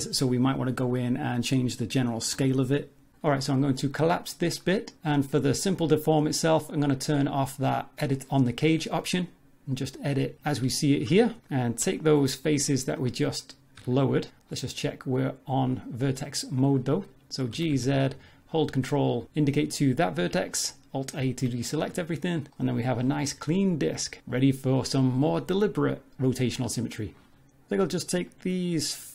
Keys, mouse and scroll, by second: 1.2 s, 2.5 middle click, 4.6 click, 6.7 click, 9.7 middle click, 10.2 ctrl+middle click, 10.7 shift+middle click, 11.3 ctrl+middle click, 11.4 click, 11.9 shift+click, 12.4 middle click, 13.8 z, 14.5 click, 17.5 g, 19.2 alt+a, 20.5 middle click, 21.3 Tab, 21.6-22.0 scroll down 3, 21.9 z, 23.0 middle click, 23.1 shift+middle click, 23.4 scroll down 1, 25.3 shift+middle click, 28.3 shift+click.